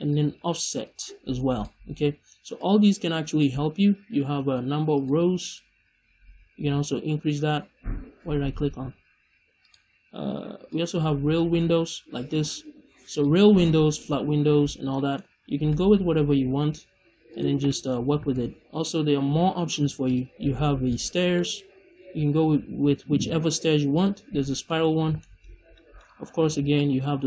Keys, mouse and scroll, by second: 0.0-1.6 drag, 1.6 right click, 2.5 click, 3.3 right click, 4.9 click, 9.5-11.3 drag, 11.3 middle click, 13.0-14.9 drag, 14.9 middle click, 15.4 scroll down 2, 15.6 middle click, 16.4 scroll down 2, 16.7 a, 17.5 middle click, 17.9-18.2 scroll up 1, 18.2 shift+a, 22.2-24.0 drag, 22.2-24.0 right drag, 24.6 middle click, 24.8-25.1 scroll up 1, 25.1 shift+middle click, 25.5 scroll down 1, 25.7-26.2 middle drag, 26.6-27.2 drag.